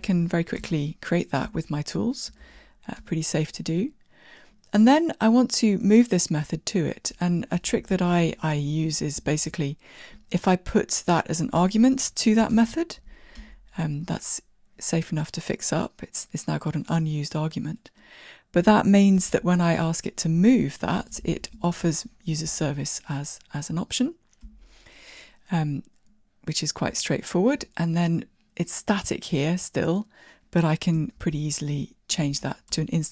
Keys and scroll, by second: 5.6 super+e, 12.5 Tab, 12.6 alt+Return, 24.6 Tab, 27.3 super+b, 31.2 ctrl+alt+shift+t.